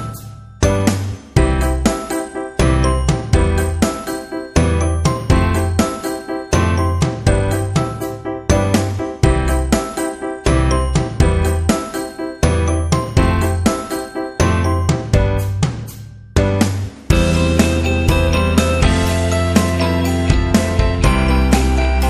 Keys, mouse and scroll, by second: 0.2 scroll up 1, 0.9-2.0 scroll up 3, 1.8-2.5 typing, 3.4 click, 4.9 click, 5.3 Left, 6.3 Left, 7.1 click, 8.3 alt+scroll up 1, 9.1 alt+click, 9.2-9.9 typing, 10.6 alt+click, 11.8-12.5 typing, 12.1 click, 12.7-13.3 alt+scroll down 2, 13.7-14.7 typing, 14.2 click, 15.6 alt+scroll up 1, 16.3 click, 17.4 click, 18.1-18.9 typing, 18.1 click, 18.5 click, 19.7 click, 21.4 click.